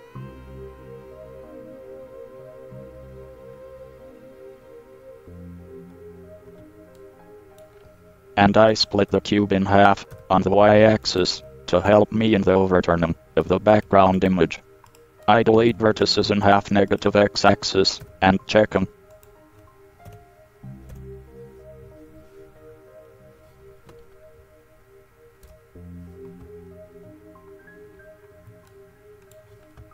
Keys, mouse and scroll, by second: 6.7 Tab, 8.0 click, 9.3 l, 10.3 x, 12.1 KP_7, 13.9 ctrl+r, 15.5 middle click, 16.3-18.4 right drag, 18.2 x, 20.3 KP_7, 21.1 KP_1, 25.6 ctrl+KP_1.